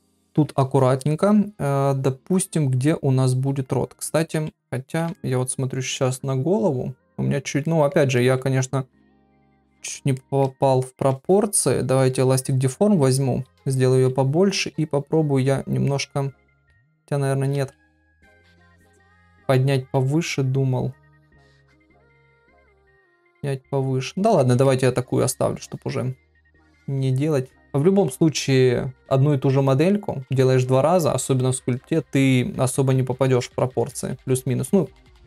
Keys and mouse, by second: 0.3 KP_3, 5.2 ctrl+middle click, 7.7 ctrl+middle click, 8.2 middle click, 9.5 KP_3, 10.2 shift+middle click, 10.8 ctrl+middle click, 13.5-13.9 ], 15.0-16.4 drag, 16.7 ctrl+z, 17.1 click, 17.6 ctrl+z, 18.0-19.0 drag, 19.3 ctrl+z, 23.1-24.3 middle drag, 24.7 ctrl+middle click, 34.1-34.5 [.